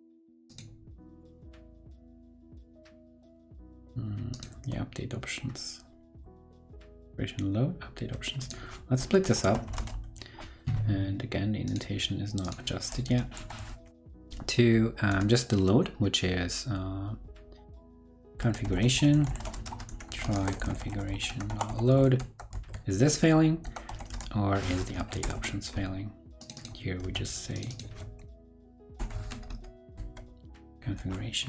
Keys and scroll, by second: 13.0 super+Left, 13.6 super+Right, 22.5 super+s, 24.8 shift+super+Left, 24.9 shift+super+Left, 27.0 super+c, 29.9 super+v, 30.4 super+Right, 30.6 super+s, 30.8 super+r.